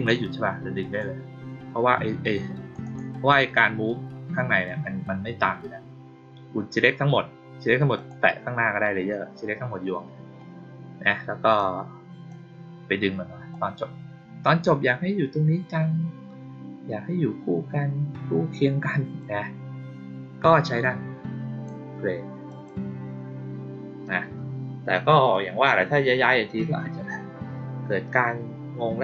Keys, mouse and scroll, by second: 2.1 click, 2.8 click, 7.9 click, 11.5-12.2 drag, 13.4-19.1 drag, 20.6-21.6 drag, 22.4 click.